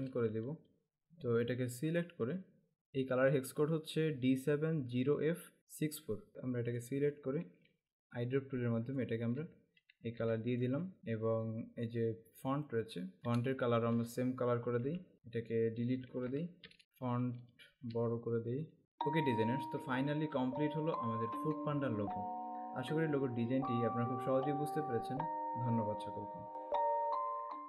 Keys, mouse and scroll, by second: 0.0 space, 0.5 alt+scroll up 1, 1.6 click, 6.9 click, 9.1 click, 10.3 v, 10.5 click, 12.1 click, 13.2 alt+scroll up 1, 13.4 space, 13.5 click, 15.1 v, 15.4 click, 16.3 Delete, 17.7 alt+shift+click, 18.8 space.